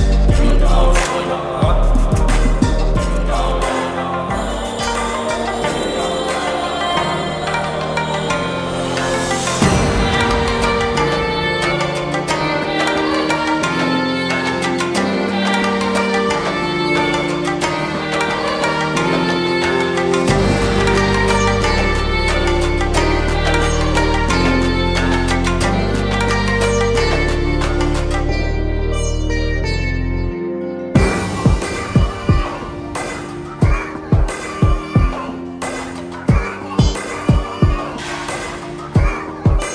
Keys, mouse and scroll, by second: 1.9-6.0 drag, 8.4 ctrl+t, 10.2-12.0 drag, 13.3 alt+scroll down 1, 14.8-15.8 shift+click, 19.9 click, 20.2 ctrl+t, 22.4-24.0 drag, 30.8 ctrl+click, 31.3 click, 32.5-38.1 shift+drag, 39.6 alt+scroll down 1.